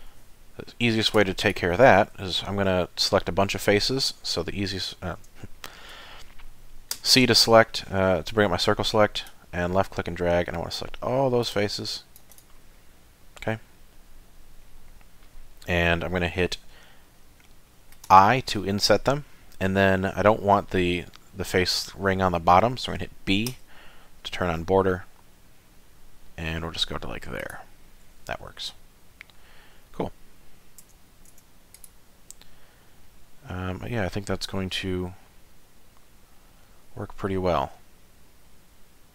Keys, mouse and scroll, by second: 1.2 3, 1.4 click, 4.6 middle click, 5.5 shift+middle click, 6.0 middle click, 6.9 c, 12.8 middle click, 16.3 middle click, 17.1 middle click, 18.1 i, 27.8 middle click, 30.8 Tab, 31.3 Tab, 31.7 click, 33.1 middle click, 37.3-39.1 scroll up 1.